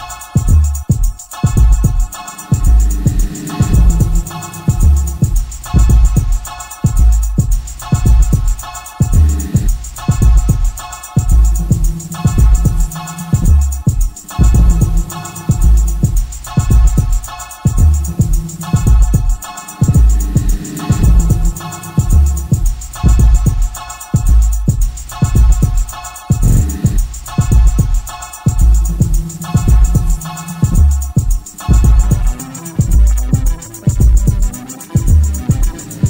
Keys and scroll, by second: 0.2 3, 0.5 ], 1.5 4, 5.8 F1, 9.9 Delete, 14.6 ctrl+d, 14.8 Escape, 27.9 2, 28.2 ], 30.9 4, 33.7 Delete.